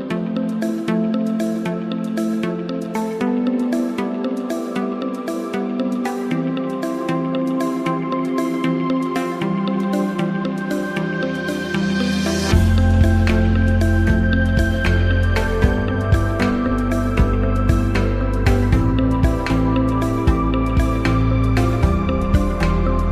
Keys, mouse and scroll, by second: 3.6 click, 5.0-5.8 click, 12.0 click, 14.5 click, 16.7 click, 22.7 click.